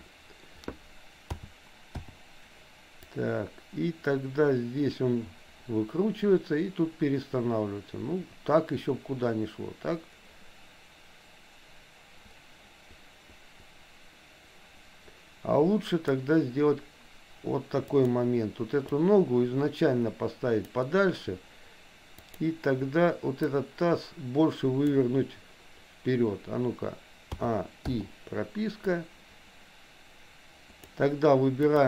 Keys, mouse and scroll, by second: 1.4 a, 2.0 i, 3.2-16.3 drag, 17.9 click, 19.0-20.8 drag, 22.3 click, 23.5-25.0 drag, 27.4 a, 27.9 i, 28.9-30.9 drag, 31.7 click.